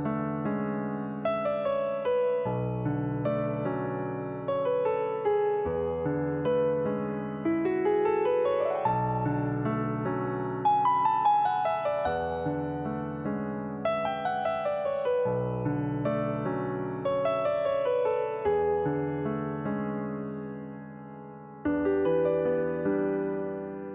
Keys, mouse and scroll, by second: 3.2 click, 3.6 click, 4.6 click, 5.1 alt+click, 5.5-5.9 scroll down 2, 5.9-6.9 shift+middle drag, 6.9 e, 8.4 click, 11.3 Tab, 11.9 Tab, 12.5 click, 13.5 l, 14.3 l, 15.8 click, 16.5 click, 18.1-19.5 middle drag, 19.5 click, 20.1 click, 20.5 click, 22.3 middle click, 23.2 click.